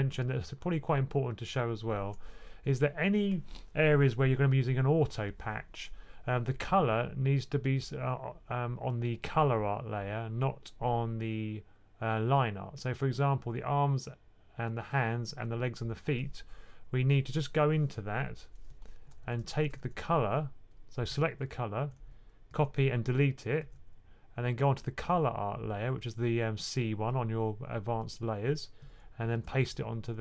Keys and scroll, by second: 18.9-19.7 typing, 22.4 super+c, 23.5 x, 29.2 super+v.